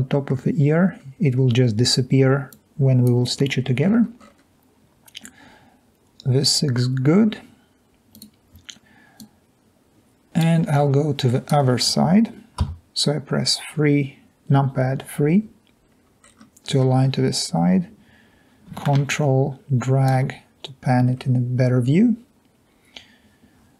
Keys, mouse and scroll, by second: 0.6 middle click, 0.6 scroll down 2, 2.5 click, 4.2 middle click, 4.2 scroll up 2, 4.3 scroll down 2, 4.4-5.0 scroll up 2, 9.2 drag, 12.7 3, 15.9-16.2 scroll up 2, 16.2-17.5 scroll down 2, 16.4-17.5 middle drag, 19.1-19.5 ctrl+drag.